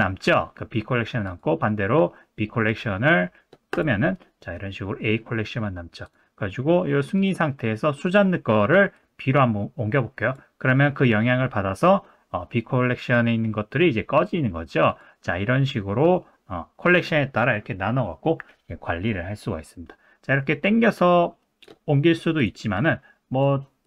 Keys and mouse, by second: 1.2 click, 3.7 click, 6.0 click, 7.2 click, 8.1 click, 8.9 click, 14.9 click.